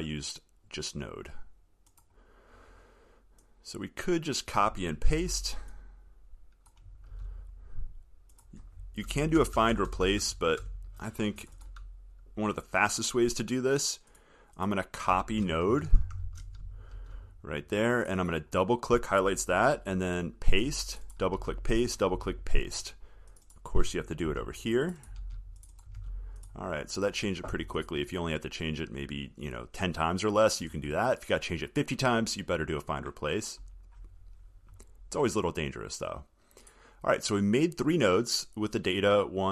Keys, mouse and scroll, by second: 5.4 ctrl+c, 7.4 ctrl+v, 17.1 ctrl+c, 20.7 ctrl+v, 21.6 ctrl+v, 22.4 ctrl+v, 25.5 ctrl+v, 26.2 ctrl+v.